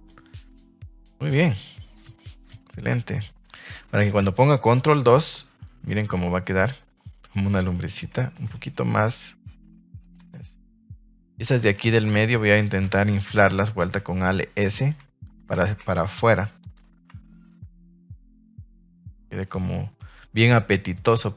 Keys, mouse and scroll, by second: 0.2-1.0 middle drag, 1.5-1.9 middle drag, 2.5-3.2 middle drag, 3.8 middle drag, 4.9 ctrl+2, 5.2-5.6 middle drag, 6.3-6.7 middle drag, 6.9-7.3 middle drag, 7.6 Tab, 7.8 middle click, 8.3 alt+s, 10.0 click, 10.2 Tab, 10.8 shift+middle click, 11.0 Tab, 11.2 middle click, 11.7 alt+right click, 12.6 alt+shift+right click, 13.1 alt+shift+right click, 13.7 alt+shift+right click, 14.0 middle click, 14.7 alt+shift+right click, 15.2 middle click, 15.5 ctrl+z, 15.9 alt+shift+right click, 16.6 alt+shift+right click, 17.5 alt+s, 19.1 click, 19.3 Tab, 19.7 middle drag, 20.0 a, 20.2 a, 20.4-21.3 middle drag.